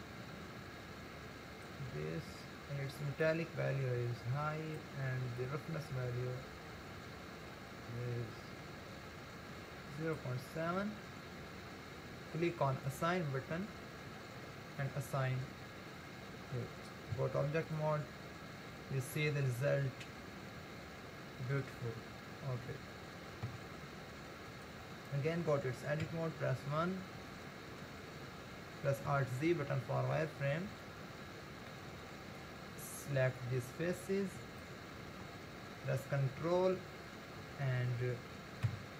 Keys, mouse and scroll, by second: 2.1-3.0 scroll down 2, 3.2-8.6 drag, 12.8-15.9 drag, 16.1-17.1 scroll down 1, 17.1 Tab, 18.4-18.8 scroll down 2, 19.2-22.2 middle drag, 23.5 Tab, 26.0 KP_1, 26.7 scroll up 2, 27.3-29.1 shift+middle drag, 29.1 alt+z, 30.2 scroll up 4, 30.9-33.4 shift+middle drag, 33.4 click, 38.7 ctrl+KP_Add.